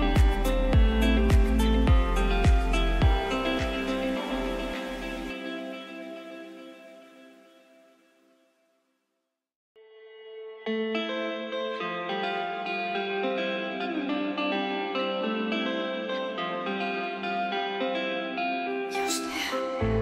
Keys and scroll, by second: 13.0 space.